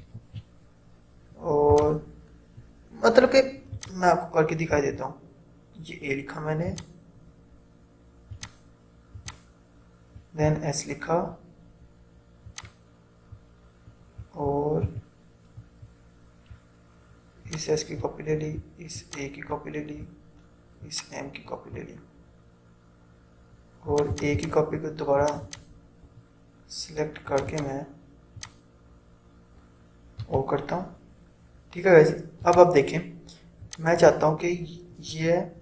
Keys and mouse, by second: 0.2 shift+m, 1.8 click, 4.8 a, 6.7 click, 10.2 s, 12.6 click, 14.9 v, 17.6-24.0 alt+drag, 30.4 o, 32.5-35.6 drag.